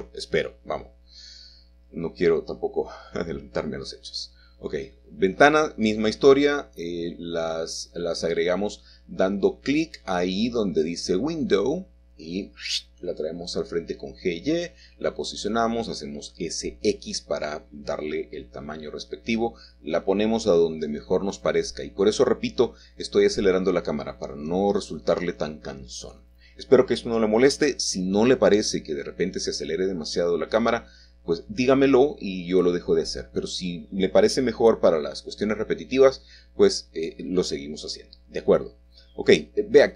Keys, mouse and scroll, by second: 0.2 click, 0.3 scroll up 1, 0.6 scroll down 1, 2.1 typing, 2.2 shift+click, 3.2 click, 4.1 shift+middle click, 4.2-4.8 typing, 4.8 shift+middle click, 4.9 scroll down 1, 5.6 scroll up 1, 5.8 shift+middle click, 7.3 shift+middle click, 8.5 Escape, 8.5 ctrl+z, 8.5 ctrl+scroll down 1, 8.6 shift+middle click, 8.7 shift+scroll up 1, 9.3 click, 9.5 click, 9.6 click, 9.7 scroll down 3, 11.0 click, 11.6 scroll up 3, 12.1 shift+middle click, 12.3 click, 12.7-13.0 scroll down 2, 13.0 y, 13.2 click, 13.6 g, 14.0 click, 14.3 1, 14.5 scroll up 1, 14.9 g, 15.3 click, 15.4-15.8 scroll up 3, 15.9 shift+middle click, 16.1-16.5 scroll down 2, 16.5 shift+middle click, 16.9 g, 17.3 shift+middle click, 17.8 scroll up 1, 17.8 shift+middle click, 18.6 g, 19.1 click, 19.2 scroll down 3, 20.0 s, 20.5 s, 20.5 z, 21.1 shift+middle click, 21.1 shift+click, 22.6 middle click, 22.7 click, 22.9-25.4 drag, 25.4 middle click, 25.5-26.5 drag, 25.9-27.0 scroll down 1, 27.5 shift+middle click, 27.5-28.0 shift+scroll down 1, 28.0-28.4 scroll down 1, 31.7 shift+middle click, 33.1 middle click, 36.5-37.0 scroll up 3, 36.5 typing, 37.0 shift+scroll down 2, 37.6 click.